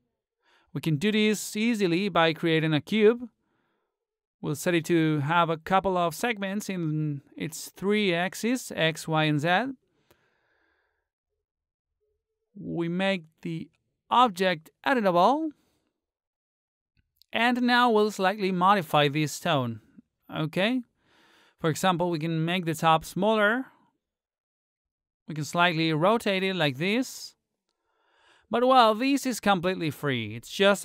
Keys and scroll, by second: 20.6 t, 27.4 ctrl+z.